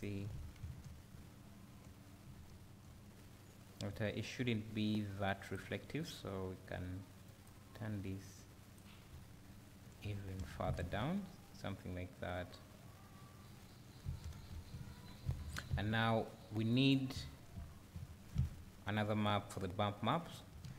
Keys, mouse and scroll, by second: 0.0 ctrl+shift+click, 0.9 `, 5.6 click, 9.1 `, 10.1 scroll down 1, 10.8 `, 19.0 click, 20.1 click.